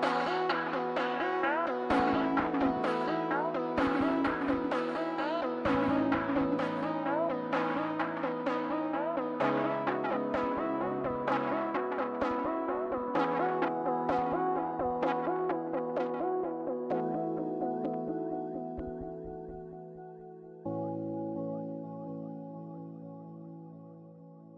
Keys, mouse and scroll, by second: 24.4 middle click, 24.4 scroll down 1.